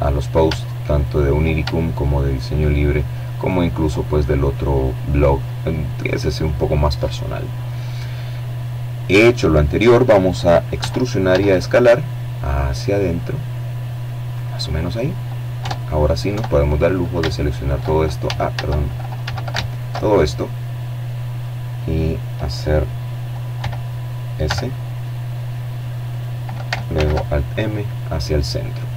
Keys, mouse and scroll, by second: 0.0 right click, 1.0 right click, 1.8 right click, 2.0-3.5 middle drag, 3.5-4.0 scroll down 1, 6.1 middle click, 6.7-8.0 drag, 8.5 e, 9.0 s, 12.0 click, 13.3 Tab, 13.9 Tab, 15.0 alt+shift+right click, 15.9 alt+shift+a, 16.9 a, 17.3 alt+shift+right click, 17.9 alt+shift+click, 21.2 e, 22.1 s, 23.8 click, 24.6 alt+m, 25.2 alt+click, 25.9-27.5 middle drag, 27.8 middle click.